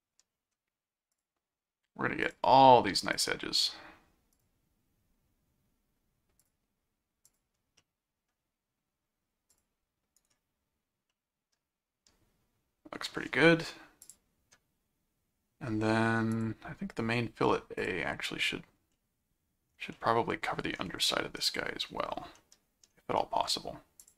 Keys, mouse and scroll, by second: 1.1 click, 2.2 click, 3.1 click, 4.3 click, 6.4 click, 7.2 click, 7.8 middle click, 9.5 click, 10.2 right click, 11.1-13.1 middle drag, 14.0 click, 16.3 click, 17.8 click, 18.9 middle click, 19.9 middle click, 22.3 middle click, 23.2 middle click, 24.0 click.